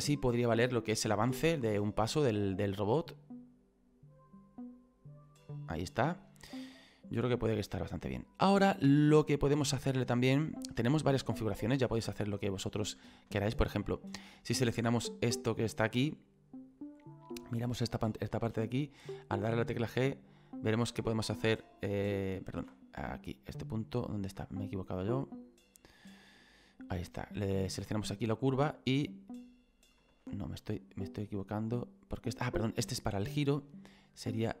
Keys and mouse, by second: 0.6 middle click, 2.3 click, 5.5 middle click, 6.3 shift+middle click, 7.1 click, 9.9 middle click, 10.4 shift+middle click, 11.8 shift+middle click, 13.4 shift+middle click, 14.6 right click, 15.3 middle click, 22.2 click, 23.3 right click, 23.8 middle click, 27.5 click, 28.8 click, 31.1 click, 32.6 ctrl+click, 32.7 ctrl+z, 33.3 middle click, 34.3 right click.